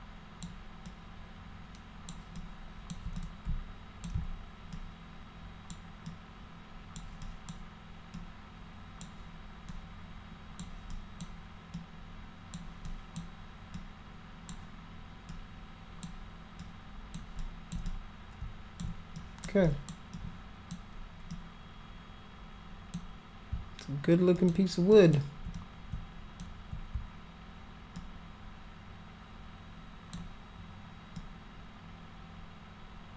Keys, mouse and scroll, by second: 0.8-2.0 alt+drag, 2.3 alt+click, 3.1 click, 4.7 alt+click, 6.0 alt+click, 7.2 alt+click, 8.1 alt+click, 9.6 alt+click, 10.9 alt+click, 11.7 alt+click, 12.8 alt+click, 13.7 alt+click, 15.3 alt+click, 16.6 alt+click, 17.4 alt+click, 17.9 click, 19.2 alt+click, 19.6 alt+click, 20.1 alt+click, 21.3-22.9 drag, 24.3 alt+click, 24.9 alt+click, 25.5 click, 27.9-30.1 alt+drag, 31.2-33.1 alt+drag.